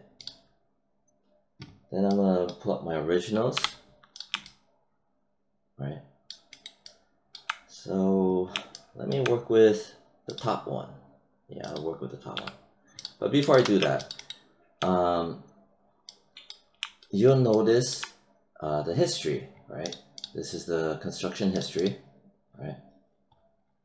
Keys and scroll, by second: 3.5 h, 12.3 w.